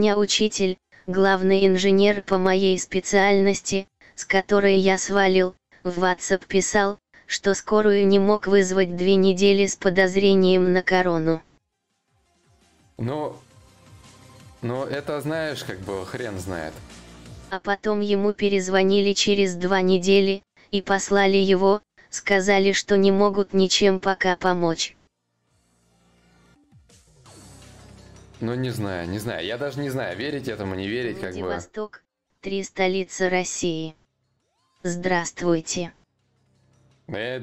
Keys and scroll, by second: 5.2 4.